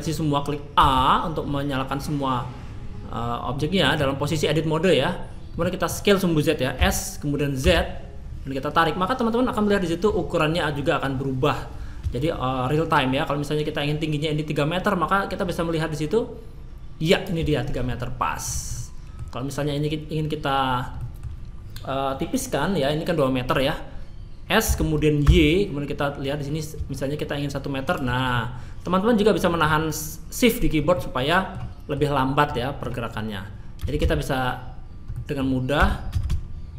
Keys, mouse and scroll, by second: 0.8 a, 3.5 middle click, 5.6 middle click, 6.7 s, 17.9 middle click, 18.7 middle click, 21.0 middle click, 24.6 s, 28.3 middle click, 30.9 middle click, 31.7 middle click, 32.5 middle click, 33.8 a, 34.0 a, 35.1 middle click, 35.8 s.